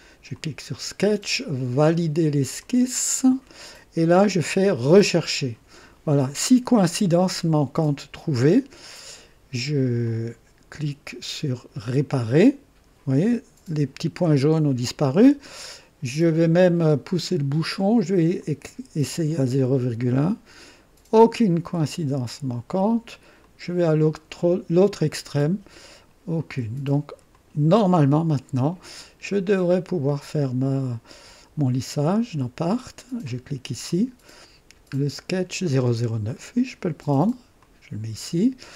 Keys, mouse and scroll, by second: 0.3 click, 2.5 click, 5.0 click, 10.0 click, 11.8 click, 17.1 click, 18.3 click, 19.9 click, 21.8 click, 23.4 click, 24.4 click, 25.2 click, 26.4 click, 27.3 click, 29.5 click, 31.9 click, 33.8 click, 35.0-35.5 scroll down 1, 36.3 click, 37.5 click.